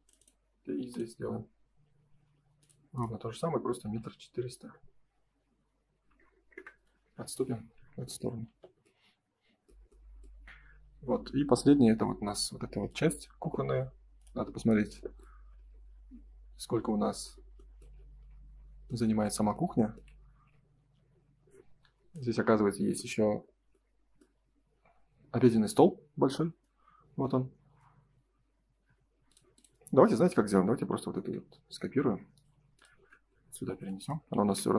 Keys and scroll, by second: 4.6 Return, 6.5 Return, 7.2 space, 7.5 Escape, 8.4 ctrl+s, 20.7 ctrl+s, 31.0 ctrl+c, 34.3 ctrl+v.